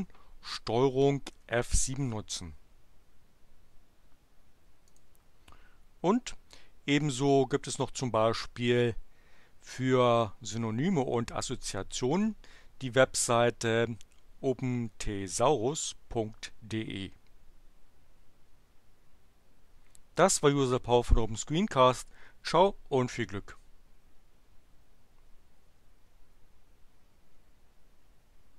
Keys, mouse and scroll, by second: 1.3 ctrl+F7, 4.8 click, 7.0 click, 12.1-14.0 drag.